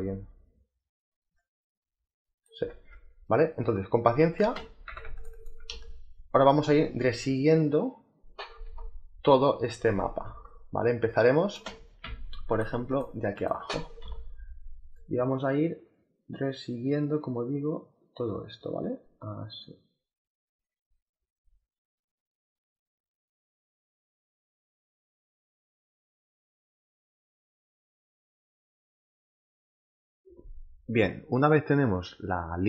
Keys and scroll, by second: 2.6 ctrl+z, 3.5 space, 4.7 z, 5.5 space, 10.1 space, 11.0 space, 11.9 z, 24.3 space, 25.8-30.6 typing.